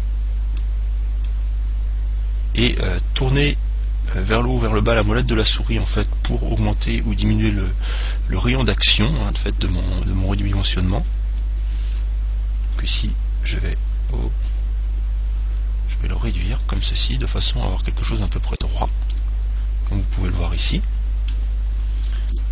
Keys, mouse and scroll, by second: 18.8 click, 19.3-21.3 middle drag.